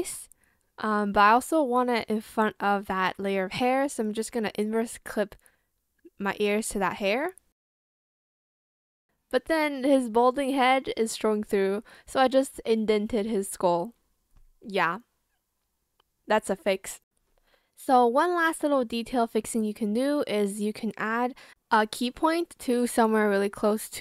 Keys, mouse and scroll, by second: 5.2 shift+click, 6.3 shift+click, 7.3 ctrl+click, 7.5 ctrl+c, 8.1 shift+click, 8.4 ,, 8.5 ctrl+space, 8.5 ctrl+v, 8.6 Return, 11.8 ctrl+click, 19.9 ctrl+click, 20.8 ctrl+click, 22.5 click, 22.5 shift+b, 22.7 shift+click, 22.9 ctrl+z, 23.1 ctrl+z, 23.2 ctrl+z.